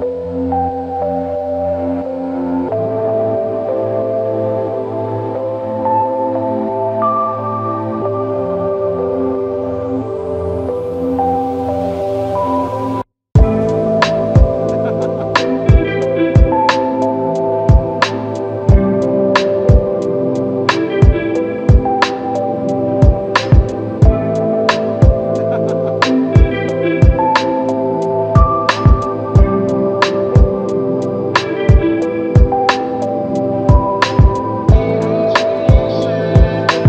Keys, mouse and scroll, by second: 5.5 ctrl+scroll up 1, 7.1-7.5 ctrl+scroll down 1, 14.7 q, 24.5 ctrl+i.